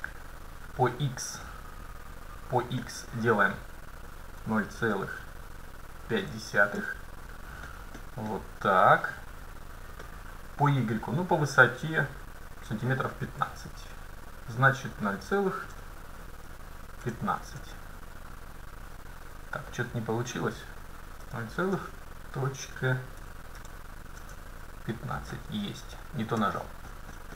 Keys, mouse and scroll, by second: 1.5-3.2 middle drag, 2.9-4.8 drag, 7.7-10.2 middle drag, 10.1-12.0 drag, 19.8-21.5 drag, 25.4-27.3 middle drag.